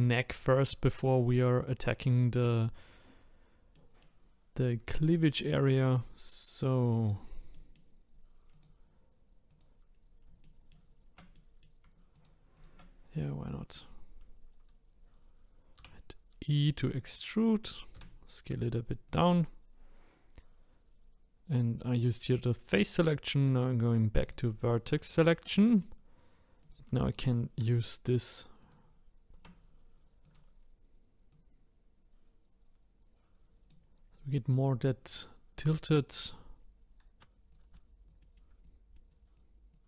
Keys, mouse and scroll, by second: 3.8-7.0 middle drag, 7.0 click, 7.5-8.5 middle drag, 8.5 click, 9.5 click, 9.9 scroll up 2, 10.4 shift+middle click, 11.3 middle click, 12.1 shift+click, 12.5 shift+click, 13.7 click, 24.2 click, 24.9 middle click, 25.6-26.6 middle drag, 26.6 click, 27.2 shift+click, 28.6 click, 29.3 ctrl+z, 30.2 click, 31.3-34.3 drag, 38.2 middle click, 38.6 click, 38.9 middle click, 39.3 click, 39.5 scroll up 1.